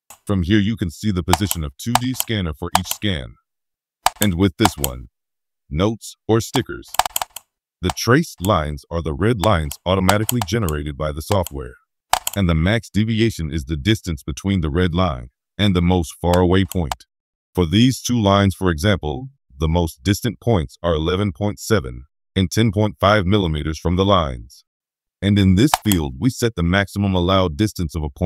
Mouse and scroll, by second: 1.3 click, 1.9 click, 2.7 click, 4.0 click, 4.6 click, 6.9 click, 10.0 click, 12.1 click, 12.7 middle click, 13.1 middle click, 13.6-13.9 scroll up 1, 25.6 click.